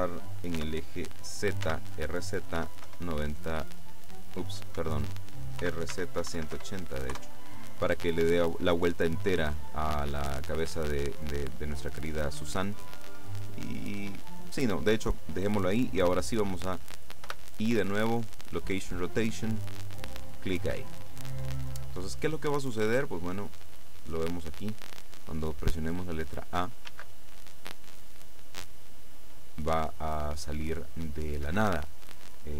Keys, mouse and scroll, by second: 0.2 click, 0.6 r, 1.7 z, 2.6 KP_9, 2.9 KP_0, 4.8 Escape, 5.7-6.6 typing, 11.7-12.2 scroll down 2, 12.9-15.2 drag, 17.4 i, 19.7 click, 23.2 click, 27.0 alt+a, 31.6 Escape.